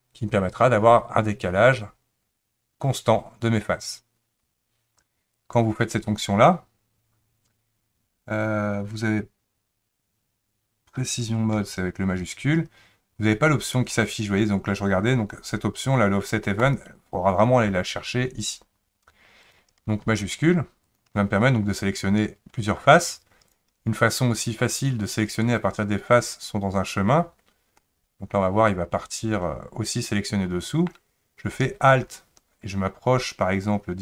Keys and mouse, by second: 5.5-13.8 drag, 16.6 click, 19.5 click, 20.2 shift+click, 20.9 shift+click, 23.5 click, 27.8-30.9 middle drag.